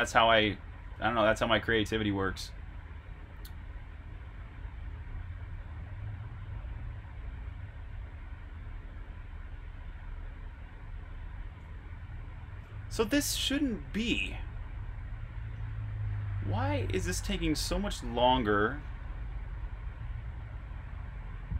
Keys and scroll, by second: 0.9-1.7 typing, 4.9-5.7 typing, 7.0-7.4 typing, 11.6-12.8 typing, 15.6-16.6 typing, 19.2 typing.